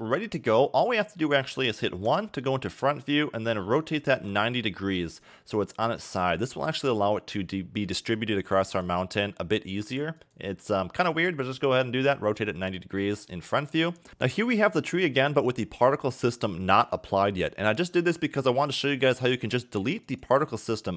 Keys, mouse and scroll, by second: 0.3 scroll down 1, 2.1 KP_1, 3.7 r, 8.7 g, 20.0 click.